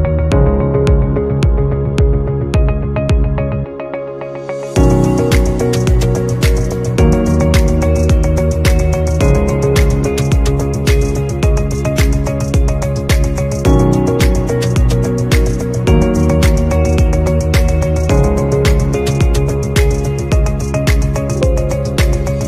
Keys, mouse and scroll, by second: 2.3-2.8 scroll down 1, 7.5 scroll up 1, 9.1 scroll down 1, 10.6 scroll up 1, 11.6-12.4 scroll down 1, 14.0 scroll up 1, 14.4 scroll down 1, 18.0-18.5 scroll down 1.